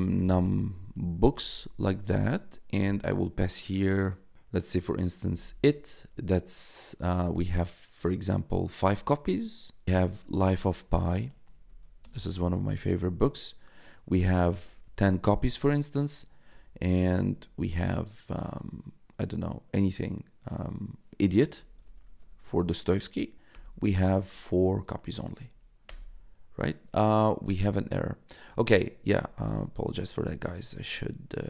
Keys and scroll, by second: 0.0-1.0 typing, 2.7 shift+9, 4.9-5.9 typing, 8.7-13.1 typing, 14.3-15.3 typing, 16.4 ., 16.9 BackSpace, 17.1 ,, 21.2-23.4 typing, 25.1 shift+0, 25.8 Return, 28.3 Up, 29.4 Left, 29.7 Down, 30.2 Left, 31.0 Left.